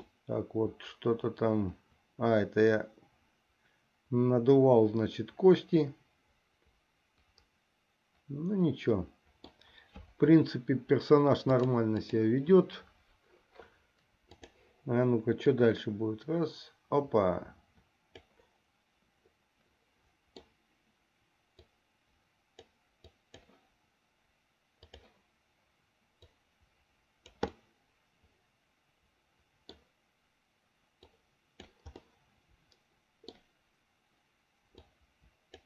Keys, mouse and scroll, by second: 0.4-9.6 middle drag, 11.7 click, 14.6 click, 15.7-18.6 drag, 20.1 middle click, 21.8-23.0 drag, 23.4 click, 25.1 click, 26.4-27.8 drag, 27.8-30.0 middle drag, 31.2 click, 32.4-33.6 middle drag, 35.0 click.